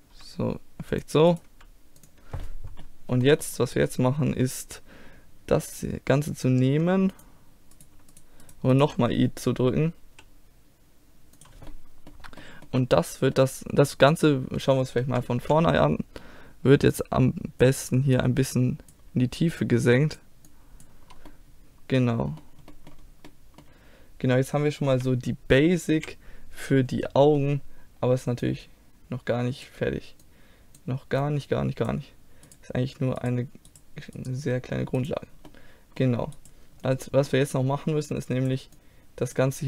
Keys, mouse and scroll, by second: 0.2 g, 1.5 g, 1.6 click, 2.5-7.2 middle drag, 7.2-10.6 drag, 7.8-10.1 right drag, 10.1 i, 11.7-14.1 middle drag, 15.5 KP_3, 16.3 middle click, 17.0-21.3 drag, 21.3-22.3 middle drag, 23.3-25.0 middle drag, 25.0 KP_3, 26.1 KP_1, 27.4-29.1 middle drag, 29.1 click, 32.5 click, 32.5 right click, 34.4-35.5 drag, 35.5-36.9 middle drag, 36.9-38.1 right drag, 38.1 middle click, 38.8-39.6 drag.